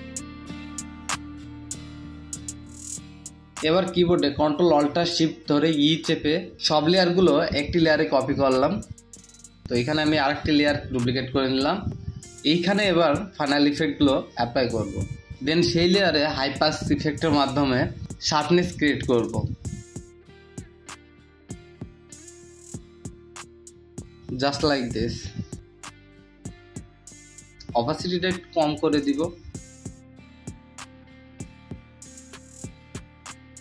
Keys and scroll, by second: 0.0-0.7 typing, 9.1 ctrl+space, 19.3 ctrl+alt+space, 33.1 ctrl+space.